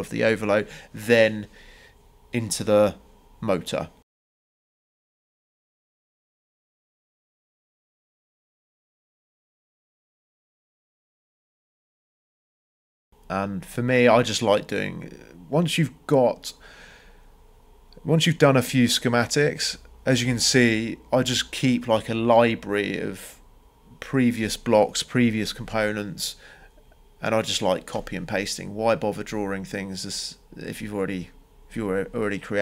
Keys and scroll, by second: 1.7 m, 2.1 Return, 20.2 c, 20.6 Return, 25.1 Escape, 27.8 c, 28.2 Return, 31.3 Escape.